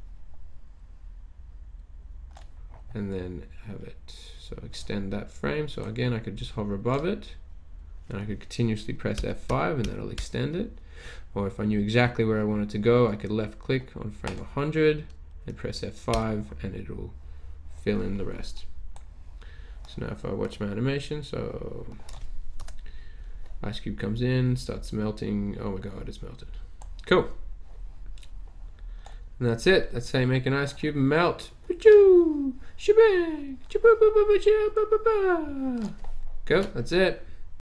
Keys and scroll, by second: 9.2 F5, 9.4 F5, 9.8 F5, 10.2 F5, 10.7 typing, 16.4 F5, 22.6 Return.